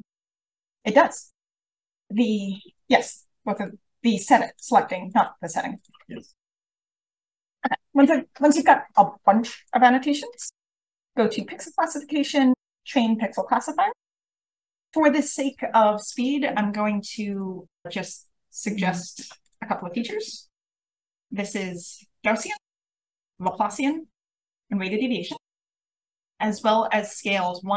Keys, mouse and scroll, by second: 0.1-2.5 drag, 1.3-2.5 scroll down 1, 2.5-3.5 scroll up 1, 3.5 click, 3.5-4.4 scroll up 1, 4.4 click, 4.4-7.2 scroll up 1, 5.0 click, 5.6 click, 6.0 click, 6.2 click, 7.2-7.5 drag, 7.2-9.5 scroll up 1, 9.5-14.4 scroll up 1, 17.2 click, 19.4 click.